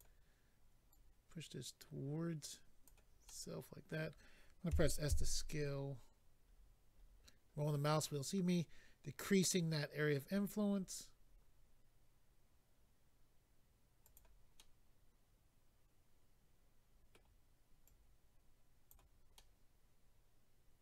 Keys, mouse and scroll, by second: 0.0 click, 0.9 click, 3.2 middle click, 4.7-5.2 typing, 6.5-7.5 scroll up 4, 10.3-11.2 scroll up 4, 14.0 click, 14.1 click, 14.5 middle click, 17.8 click, 19.4 middle click.